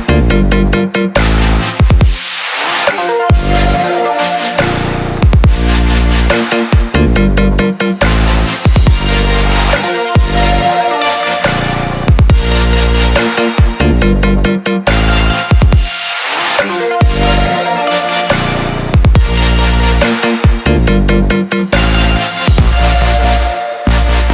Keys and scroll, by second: 0.4 ctrl+j.